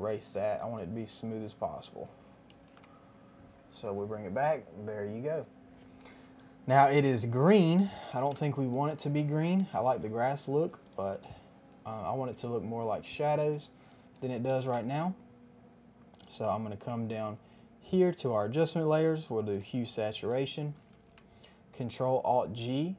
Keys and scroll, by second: 2.7 Return, 2.7 KP_0, 8.0 KP_1, 8.1 KP_0, 8.2 KP_0, 8.2 Return, 9.0 space, 14.6 KP_5, 14.7 Return, 14.7 KP_0, 20.8 ctrl+alt+g.